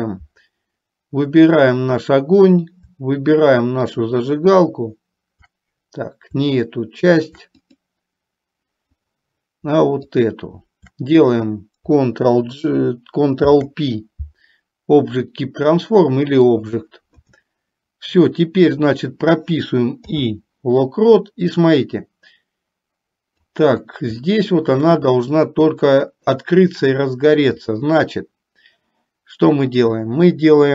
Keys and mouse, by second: 3.9 shift+click, 10.3 shift+click, 13.4 ctrl+p, 20.3 i, 23.0 click, 24.5 shift+middle click, 25.3-26.5 middle drag.